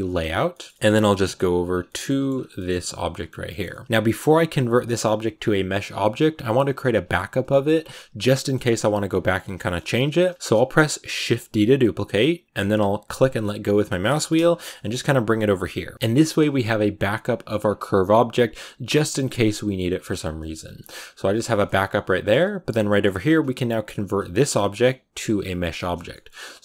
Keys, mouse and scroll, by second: 0.0 click, 0.2 scroll down 3, 0.4 middle click, 0.8 scroll down 4, 1.1 shift+middle click, 1.6 scroll down 2, 1.7 middle click, 1.9-2.7 scroll up 6, 1.9 shift+middle click, 2.4 shift+middle click, 3.0 shift+middle click, 3.2 scroll up 1, 3.4 shift+middle click, 4.3 g, 7.3-8.6 middle drag, 8.6-10.0 scroll down 4, 9.4 middle click, 10.0 shift+middle click, 10.9 scroll up 1, 11.1 shift+d, 14.0-14.4 scroll down 3, 14.0 shift+middle click, 14.5 g, 15.7 a, 15.9 scroll up 3, 17.5-19.9 scroll down 2, 19.9-20.5 scroll down 4, 20.5 a, 20.7-22.9 middle drag, 22.9 scroll up 6, 24.1 right click, 24.7 g, 25.6 shift+middle click, 25.8 scroll down 2, 26.0 middle click, 26.3 g.